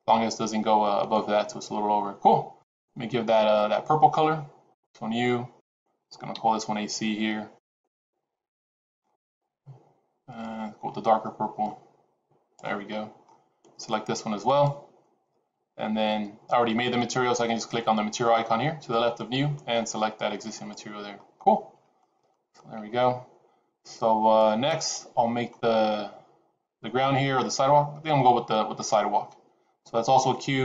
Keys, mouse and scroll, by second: 0.9 click, 2.5 click, 4.7 click, 5.5 click, 7.8 click, 12.8 middle click, 12.8-13.5 scroll down 1, 14.3 click, 19.1 click, 21.5 middle click, 22.6 middle click.